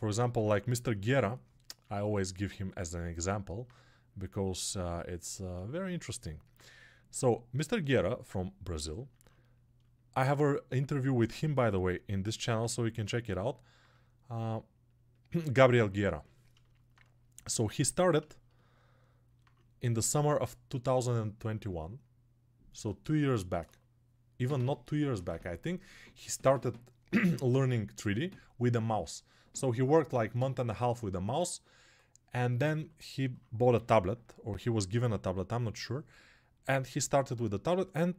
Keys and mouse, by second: 1.8-36.4 ctrl+alt+drag, 36.4 alt+right click, 37.0-38.1 alt+shift+drag.